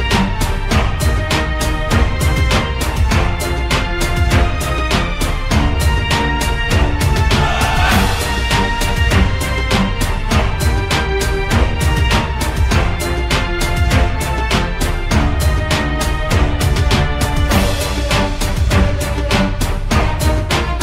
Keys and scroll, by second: 7.6-9.8 typing, 13.9 c.